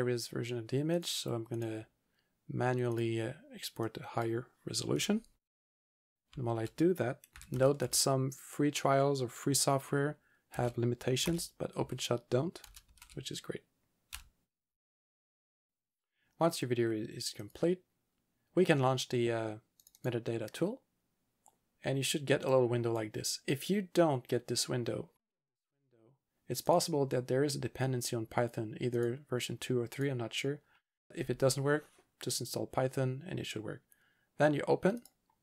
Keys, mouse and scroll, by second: 1.0 click, 1.6 double click, 2.9 double click, 2.9 click, 3.9 click, 6.3-7.8 typing, 10.3-11.2 typing, 11.8 Tab, 12.6 2, 12.9 Tab, 13.0 1, 14.1 Return, 17.5 click, 19.8 click, 20.0 double click, 22.6 click, 26.7 click, 29.0 click, 35.0 click.